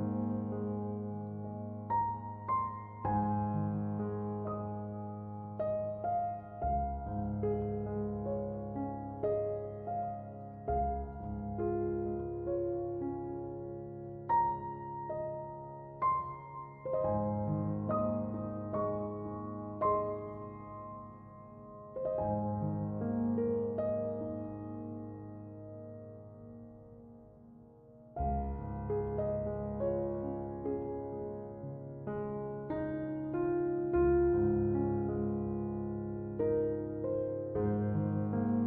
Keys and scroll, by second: 7.3-8.6 typing, 26.5 Return.